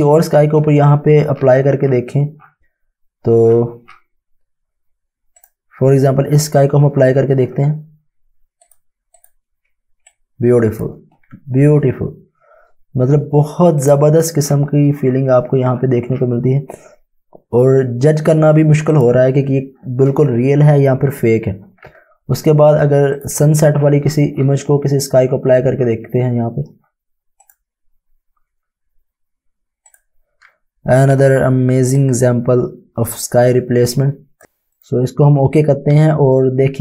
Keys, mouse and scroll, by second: 0.8-1.3 scroll down 1, 5.3 click, 7.4 space, 9.1 click, 10.1 click, 13.7 click, 14.4 scroll down 1, 18.9 click, 23.1 click, 23.7 scroll down 1, 26.8-27.3 scroll up 1, 27.4 click, 31.5-33.8 typing, 31.9 click, 34.7 click.